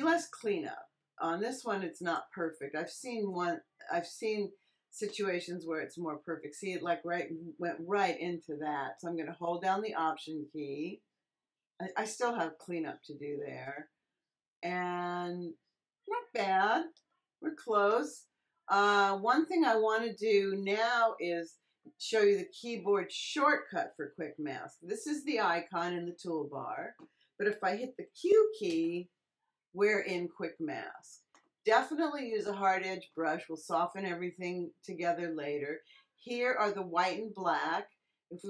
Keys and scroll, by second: 28.6 q.